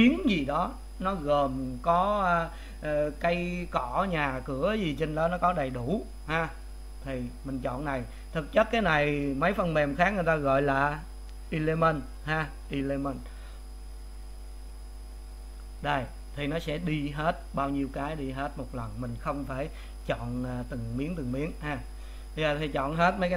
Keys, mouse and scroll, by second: 19.3 click, 20.4 click.